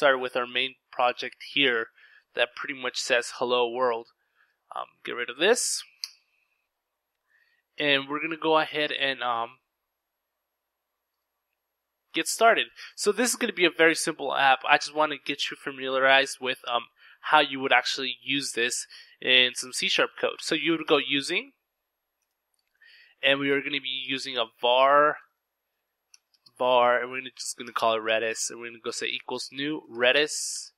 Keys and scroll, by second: 21.0-21.9 typing, 22.6 Return, 23.0-30.7 typing.